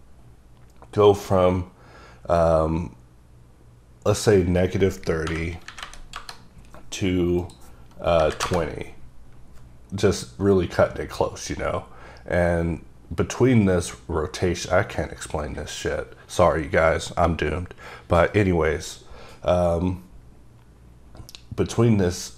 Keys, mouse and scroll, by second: 4.1 KP_Enter, 4.3 click, 5.2 KP_Subtract, 5.7 KP_3, 5.8 KP_0, 6.1 KP_Enter, 7.4 click, 8.2 KP_2, 8.3 KP_0, 8.4 KP_Enter.